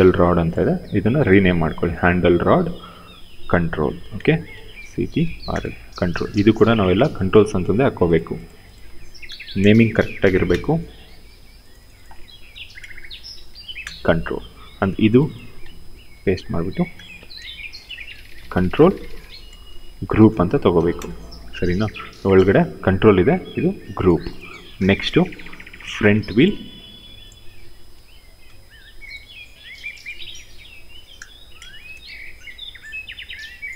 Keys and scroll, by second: 1.5 ctrl+v, 3.7 shift+-, 4.3 shift+c, 4.6 t, 5.2 Return, 8.9-10.5 typing, 12.2-13.4 typing, 13.5 Return, 15.6 ctrl+v, 16.8-18.6 typing, 19.8 shift+g, 20.2 r, 20.6 Return, 27.6 ctrl+c, 30.3 ctrl+v, 31.1 shift+-, 31.4 shift+c.